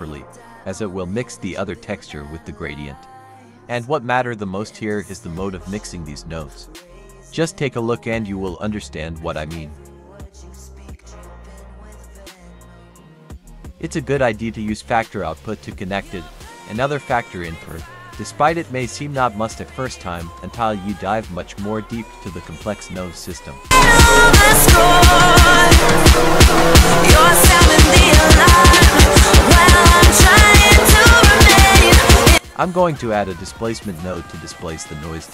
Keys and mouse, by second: 0.1 drag, 0.7-2.1 drag, 3.1 F3, 6.0 click, 9.7 drag, 17.9 ctrl+t, 23.2 click, 24.0 click, 28.5 click, 29.2 click, 31.2 click, 33.8 F3.